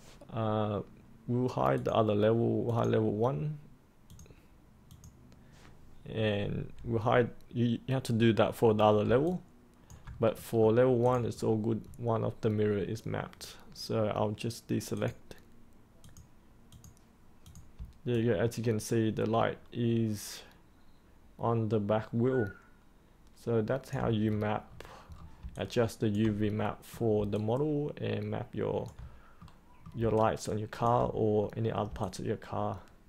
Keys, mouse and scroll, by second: 1.7-5.9 drag, 9.2 alt+click, 10.3 middle click, 11.0 click, 11.3 scroll up 1, 14.9-16.7 drag, 19.0-23.9 alt+drag, 24.2-24.6 scroll down 1, 24.6-25.0 scroll up 1, 25.0-25.3 scroll down 1, 25.5 alt+click, 26.5 middle click, 27.3 alt+click, 29.3 middle click, 30.1 alt+click, 31.3 middle click, 32.0-33.0 alt+drag.